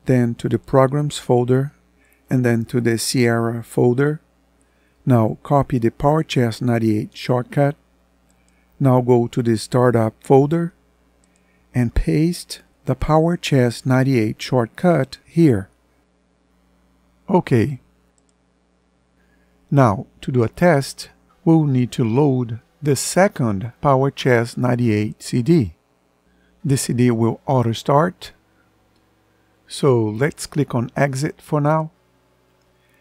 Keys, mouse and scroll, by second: 22.0 ctrl+End.